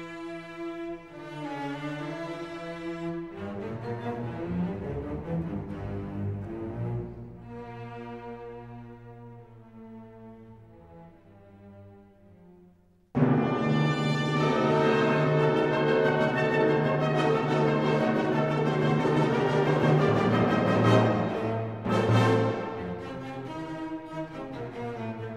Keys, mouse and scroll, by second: 1.3 scroll down 1, 4.8 scroll down 1, 5.0 click, 6.4 scroll down 1, 7.7 click, 12.5-18.4 drag, 19.0-19.3 scroll down 1, 19.5 scroll up 1, 20.6 click, 21.1-24.1 middle drag, 25.0 middle click, 25.0-25.3 scroll down 1.